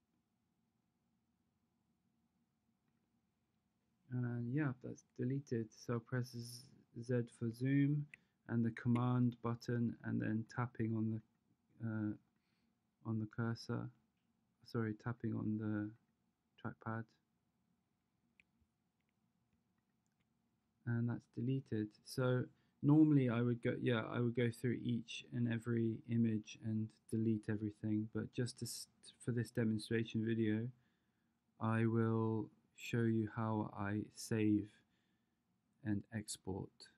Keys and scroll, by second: 6.2 z.